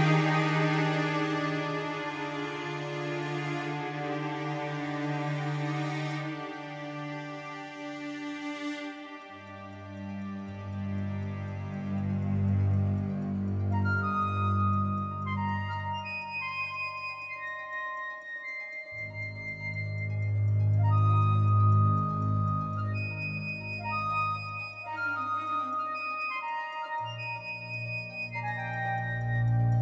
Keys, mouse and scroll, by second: 1.6-3.6 drag, 4.0-5.9 drag, 6.0-8.0 drag, 10.1 z, 12.2-14.0 drag, 14.2-16.4 right drag, 16.4-18.3 drag, 19.0-20.8 drag, 25.0-26.8 drag, 26.9-28.6 drag.